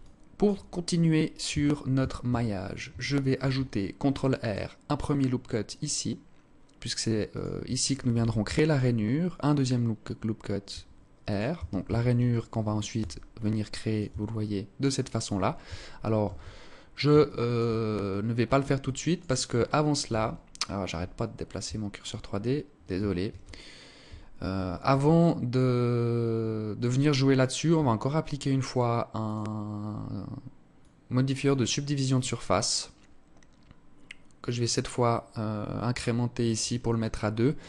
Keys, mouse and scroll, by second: 0.8 Tab, 1.2 Tab, 1.6 a, 2.6 ctrl+r, 7.4 ctrl+r, 10.8 Tab, 11.2 Tab, 11.6 alt+right click, 12.3 s, 13.4 Tab, 13.7-14.1 scroll down 4, 14.1 click, 15.5 shift+c, 16.0 scroll up 4, 16.5 alt+shift+click, 17.4 alt+click, 18.1 click, 19.4 shift+c, 19.8-20.2 scroll up 4, 20.4 alt+shift+click, 21.5 scroll up 1, 24.5 alt+click, 28.6 click, 33.7 click, 36.3 alt+click.